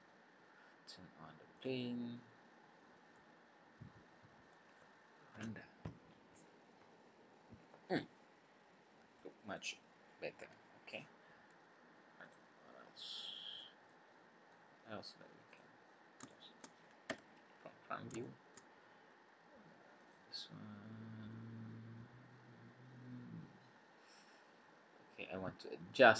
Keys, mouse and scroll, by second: 0.0-0.5 scroll up 2, 1.5 click, 2.2 scroll up 1, 2.8 scroll down 2, 3.1 middle click, 10.9 scroll up 3, 12.2 click, 13.5 click, 13.8 middle click, 15.5 click, 15.9 scroll up 1, 16.2 shift+middle click, 17.0 KP_1, 17.6-18.0 scroll up 5, 18.2 shift+middle click, 18.7-19.1 scroll up 4, 20.0 click, 24.7 scroll down 2, 25.1 scroll up 2.